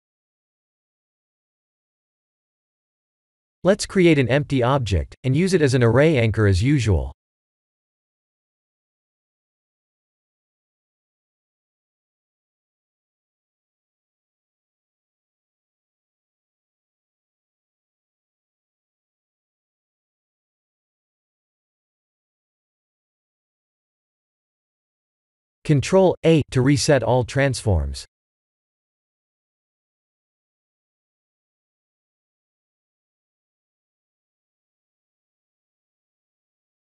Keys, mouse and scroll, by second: 1.2 middle click, 2.2 KP_1, 4.0 shift+a, 7.2 click, 7.8 shift+z, 10.0 click, 11.0 click, 12.3 click, 15.8 click, 16.8 click, 19.0 click, 19.7 click, 20.3 click, 21.3 click, 25.3-26.0 scroll down 3, 26.5 click, 27.2 ctrl+a, 29.3 middle click, 32.8 click, 34.0 click.